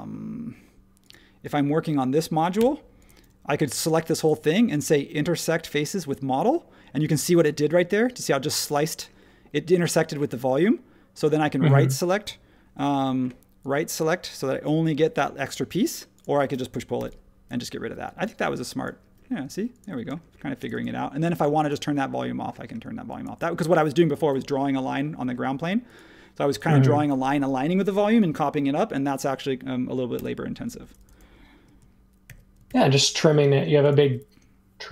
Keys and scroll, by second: 2.5 Return, 16.9 p, 17.8 e, 20.1 space, 25.4 space, 30.1 BackSpace, 32.7 super+1.